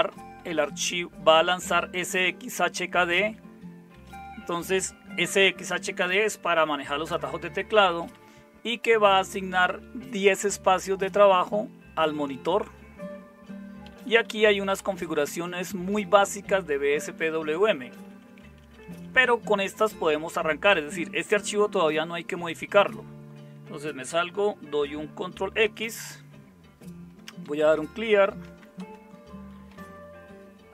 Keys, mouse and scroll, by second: 3.0 Down, 3.2 Down, 4.2 Up, 7.9 Down, 8.1 Down, 9.8 Right, 10.5 Right, 10.5 Right, 10.7-11.3 Right, 11.7 Left, 12.4 Left, 12.7 Left, 12.7-13.9 Left, 14.1 Down, 14.3 Down, 14.5 Down, 14.6 Down, 14.8 Down, 15.5-17.1 Down, 17.3 Up, 17.8 Up, 25.7 ctrl+x, 27.2-30.1 typing.